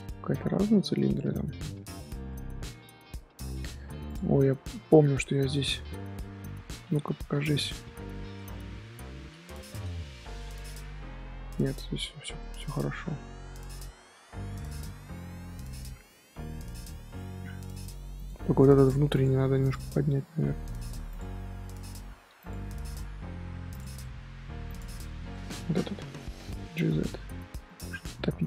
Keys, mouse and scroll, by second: 0.3-0.7 middle drag, 0.7 Tab, 1.4 Tab, 2.2-3.7 middle drag, 3.7 2, 4.0 alt+click, 4.4 shift+middle click, 4.7 scroll up 2, 5.0 scroll down 1, 5.0 scroll up 1, 5.2 scroll down 1, 5.3-7.2 middle drag, 7.2 l, 8.0 shift+h, 8.3-9.6 middle drag, 9.6 Tab, 10.3 shift+h, 10.5 middle click, 10.8 Tab, 11.7 Tab, 12.3-14.5 middle drag, 14.5 Tab, 14.7-16.4 middle drag, 16.4 Tab, 17.1 middle click, 17.5 z, 17.7 middle click, 18.1 click, 18.7 click, 19.1 click, 19.6 click, 19.9 middle click, 20.4 z, 20.6 middle click, 21.0 click, 22.3 click, 24.0 middle click, 24.6 click, 25.3 middle click, 25.5 z, 25.7 middle click, 26.5 g, 27.9 scroll down 1, 28.1-28.4 scroll up 2.